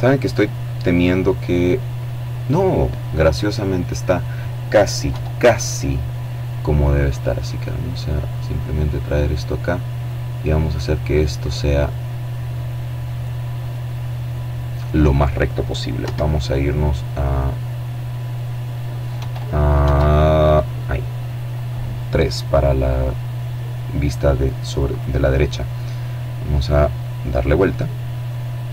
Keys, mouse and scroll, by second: 2.3 right click, 3.6 KP_7, 5.9-8.1 drag, 8.6-12.7 right drag, 12.1 click, 14.5 KP_1, 17.7 KP_2, 18.3 KP_3, 23.4 right click, 25.2-28.7 right drag.